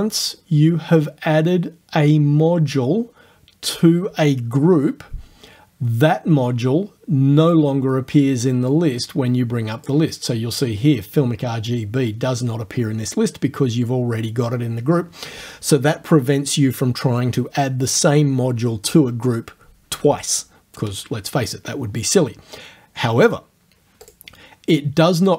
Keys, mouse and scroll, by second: 7.5 click, 8.7-10.1 drag, 24.1 click.